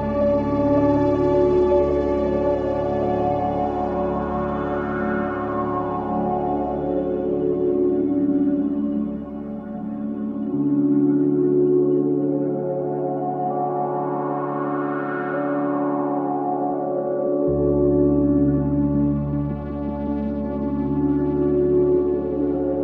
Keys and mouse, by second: 3.0 space, 4.1-6.4 drag, 8.5 click, 12.9-14.0 drag, 14.2 g, 14.9-16.3 drag, 16.0 space, 18.0 space, 18.5 click, 19.2 space, 21.0 space, 22.2 click.